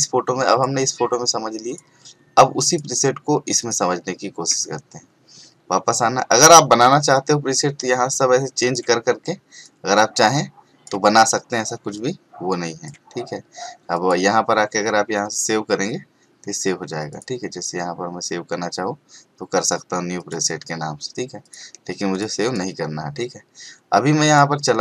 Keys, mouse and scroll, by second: 0.5 click, 7.1 click, 17.1 click, 20.2 click.